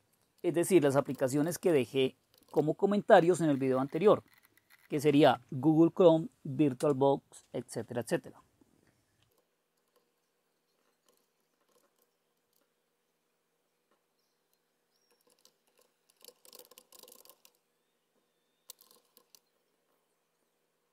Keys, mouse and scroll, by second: 0.0-7.6 typing, 9.1-10.0 typing, 9.1-9.5 Down, 11.0 Up, 11.2 Delete, 11.4 Delete, 11.7 Up, 11.9 Up, 12.3 Down, 12.5 Down, 15.3 ctrl+o, 15.8 ctrl+x, 15.9-17.9 typing, 18.7 Up, 18.8 Left, 18.9 Left, 19.2 p, 19.3 Return.